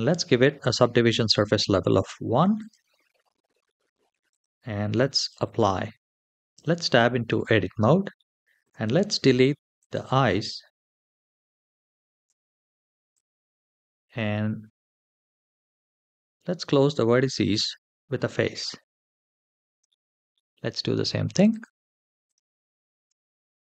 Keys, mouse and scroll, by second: 0.8 ctrl+1, 2.4 click, 4.1-5.2 drag, 6.3 Tab, 6.9-7.5 scroll up 1, 7.5-7.9 scroll up 5, 7.9 shift+middle click, 8.7 scroll up 1, 9.6 click, 11.0 l, 12.0 x, 13.6 middle click, 14.6-15.1 scroll up 3, 17.3 alt+click, 18.8 f, 19.7 shift+middle click, 20.1 middle click, 21.3 click, 22.0 l, 22.2 alt+click, 22.8 f, 23.2-23.6 scroll down 3.